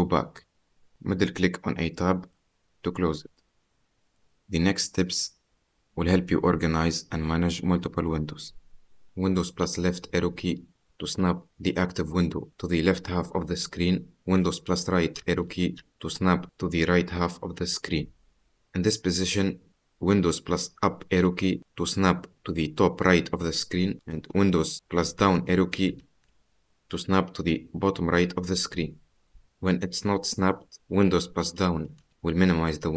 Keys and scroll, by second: 9.8 super+Left, 13.7 super+Right, 20.4 super+Up, 25.0 super+Down, 32.3 super+Down.